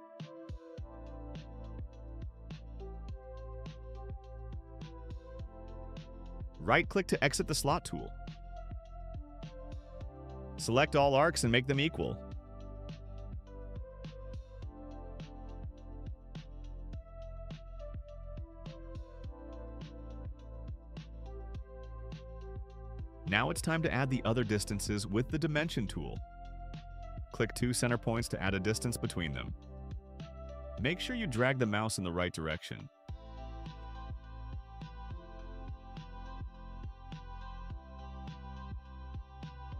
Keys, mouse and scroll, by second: 0.8 click, 2.8 click, 5.1 click, 6.1 click, 7.5 right click, 10.0 click, 10.4 middle click, 10.4 scroll up 2, 11.1 click, 11.9 click, 12.6 click, 13.3 click, 16.8 click, 17.6 middle click, 18.0 right click, 19.7 click, 20.8 middle click, 20.8 scroll up 1, 26.6 click, 27.1 middle click, 27.1 scroll up 1, 28.0 click, 29.6 click, 31.2 click, 32.7 4, 34.2 Return, 35.7 click, 36.7 click, 37.7 click, 38.6 4, 39.3 Return.